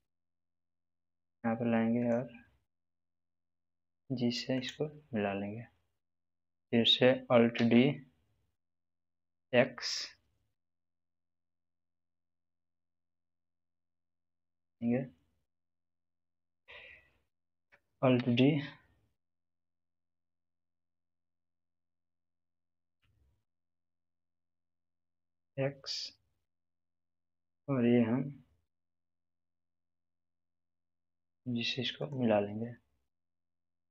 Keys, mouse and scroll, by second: 1.1 click, 3.6 g, 4.5 click, 7.5 alt+d, 9.2 x, 11.7 click, 13.1 g, 14.0 click, 17.7 click, 18.1 alt+d, 25.0 x, 28.8 x, 31.0 g, 31.9 click.